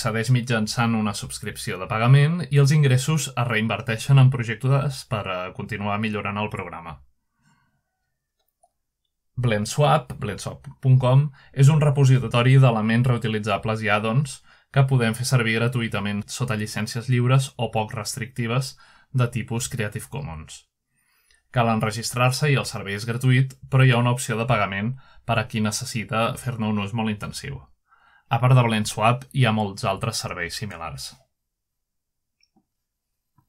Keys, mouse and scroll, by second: 0.0-0.8 scroll up 2, 3.8-5.3 drag, 5.3 click, 8.1-9.1 drag, 9.1 ctrl+Tab, 12.4 click, 15.2 click, 18.7 click, 19.0 click, 19.3-20.2 drag, 20.8 scroll up 1, 21.0-24.0 scroll down 1, 24.0-27.5 scroll up 5, 27.5 click, 31.3 click, 31.7-33.1 scroll up 3.